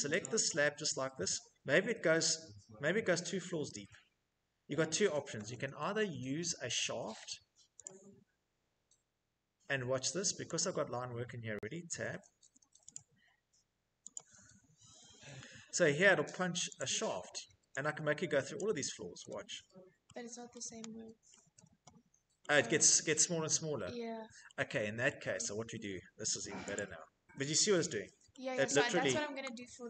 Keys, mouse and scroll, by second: 0.1 scroll, 3.5 scroll, 4.7 Escape, 7.1 click, 9.9 click, 11.2 Tab, 11.7 Tab, 14.6 Escape, 17.9 click, 19.3 middle click, 20.6 shift+middle click, 20.9 Escape, 24.0 middle click, 24.1 middle click, 24.7 middle click, 24.9 Escape, 26.1 click, 26.9 middle click, 29.5 shift+middle click.